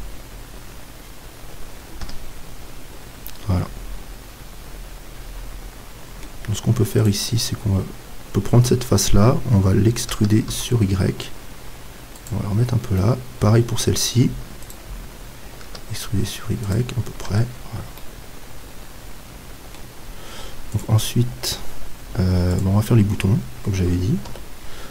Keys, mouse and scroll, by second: 0.9-5.2 middle drag, 2.0 KP_Decimal, 7.0-8.9 right drag, 10.1 e, 12.3-14.0 drag, 13.0-14.7 middle drag, 14.7-16.5 right drag, 15.6 e, 16.7-18.6 drag, 17.3 Tab, 17.7 middle click, 18.6 middle click, 23.5 middle click, 24.3 KP_7.